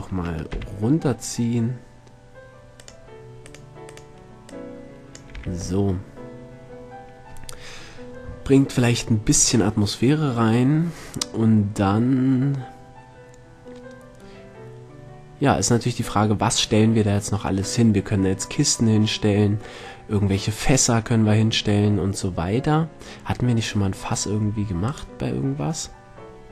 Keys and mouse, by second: 0.2 shift+d, 5.8 a, 9.6-10.9 middle drag, 22.5-25.3 middle drag, 25.3-26.5 drag.